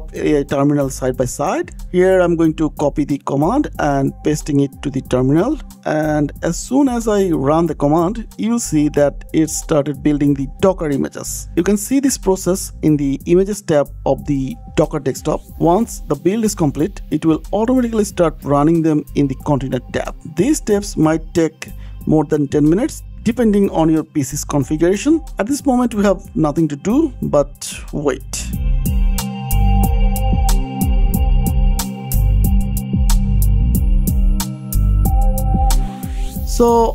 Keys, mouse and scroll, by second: 0.3 click, 1.1 click, 2.2 click, 2.5 click, 3.0 shift+click, 3.9 click, 4.6 ctrl+v, 5.2 KP_Enter, 11.8 click, 13.1 click, 15.0 click, 16.9 click, 17.6 click, 23.3 click, 24.3 click, 24.7 click.